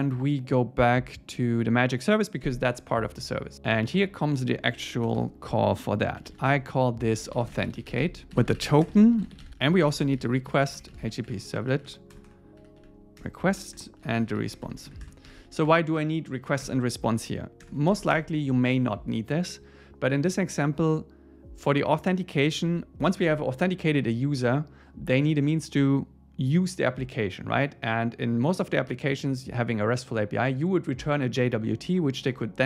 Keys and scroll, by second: 5.1 Return, 13.2 Return, 16.3 Down, 16.7 Return, 17.1 Right, 17.9 alt+8, 18.1 Return, 22.7 ⟲.